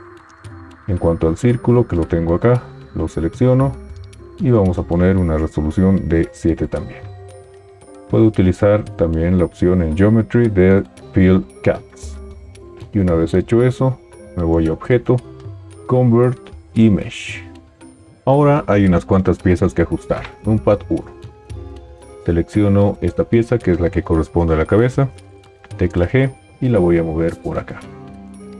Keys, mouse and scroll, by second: 20.1 KP_1, 25.6 g.